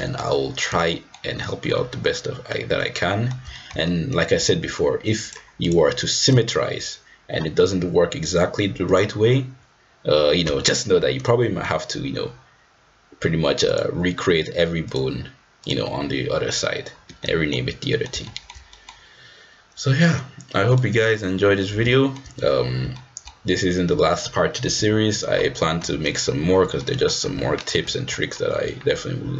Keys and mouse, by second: 0.9 shift+middle click, 1.7-2.5 middle drag, 2.8-3.3 middle drag, 3.5 shift+middle drag, 3.9 middle click, 5.3-5.8 drag, 6.3 click, 11.3 middle click, 14.9-15.8 drag, 17.2 shift+middle click, 17.9 middle drag, 18.3 shift+middle drag, 18.7 middle click, 20.7-21.8 drag, 21.9 shift+middle drag, 22.9-23.3 shift+middle drag, 24.8 f, 25.9 g, 26.8 middle click, 27.3 g, 28.1 middle click, 28.6 g.